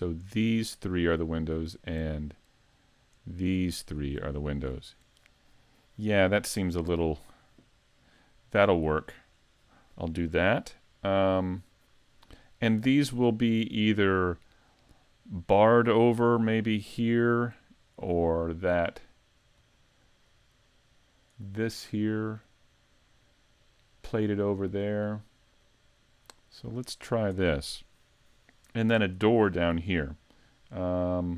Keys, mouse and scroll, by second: 0.2 shift+right click, 0.7 shift+right click, 1.4 right click, 2.4 right click, 3.3 shift+right click, 3.8 shift+right click, 19.0 middle click, 19.7 middle click, 20.3-20.6 scroll up 3, 20.6 middle click, 25.4-26.4 scroll down 1, 26.4 middle click.